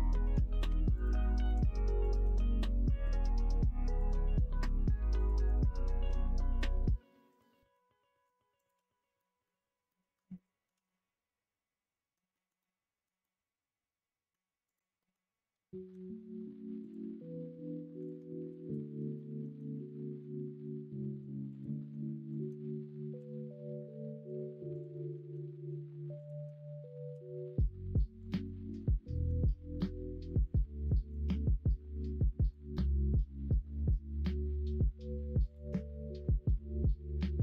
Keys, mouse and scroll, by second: 0.2 2, 0.6 2, 0.9 click, 1.1 middle click, 1.9 shift+click, 2.3 middle click, 3.0 f, 3.1 middle click, 3.9 click, 4.2 middle click, 6.4 middle click, 7.3 click, 7.5 middle click, 8.5 click, 9.1 middle click, 9.8 middle click, 10.3 shift+middle click, 10.8-12.1 middle drag, 12.2 middle click, 12.5 middle click, 13.1-14.3 middle drag, 14.9 middle click, 15.8 k, 18.7 middle click, 19.1 middle click, 19.7 middle click, 20.3 middle click, 20.8 2, 21.4 click, 23.1 f, 23.7 middle click, 24.0 middle click, 24.7 click, 24.9 middle click, 25.4 middle click, 26.1 shift+click, 27.1 f, 27.2 middle click, 28.2 click, 28.4 middle click, 29.1 click, 30.2 click, 31.1 shift+click, 32.0 f, 32.1 middle click, 32.8 middle click, 33.3 middle click, 34.6 1, 35.4 click, 36.4 g.